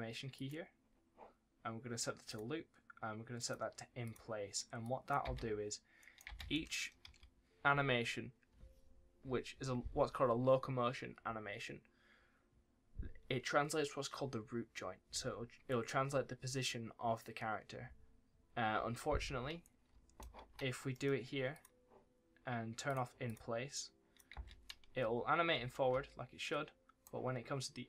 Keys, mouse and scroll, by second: 5.2 space, 5.9 right click, 6.2 space, 6.4 right click, 7.0 ctrl+s, 19.5 right click, 19.8 w, 20.4-20.8 scroll down 1, 20.8 middle click, 21.4 click, 24.3 space, 24.6 right click, 24.9 s.